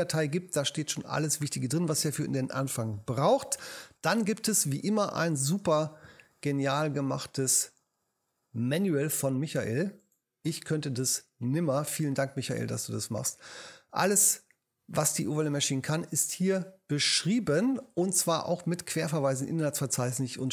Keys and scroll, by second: 2.0 space, 5.4 space.